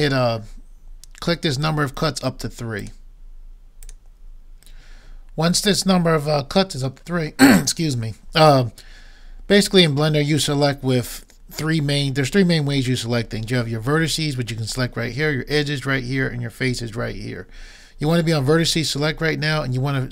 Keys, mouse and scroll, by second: 2.8-5.5 drag.